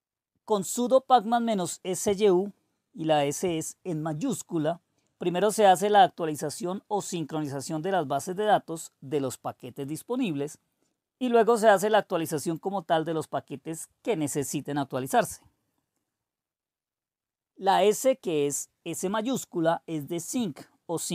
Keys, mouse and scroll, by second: 1.4-4.3 typing, 5.4 typing, 14.7 Return.